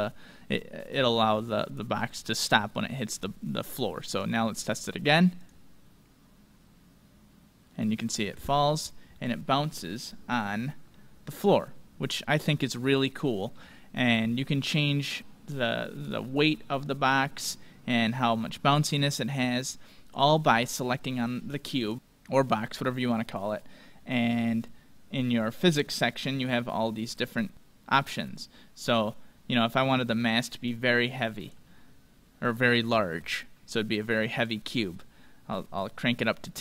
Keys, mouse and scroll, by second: 4.1-7.2 drag, 8.4-9.3 scroll up 1, 9.3-10.9 middle drag, 11.2-12.1 scroll up 1, 12.1-12.7 scroll down 1, 12.7-16.6 middle drag, 18.6 middle click, 20.3-21.9 drag, 20.8-21.9 right drag, 28.9-31.6 drag, 32.3-34.1 middle drag, 34.3-36.6 drag.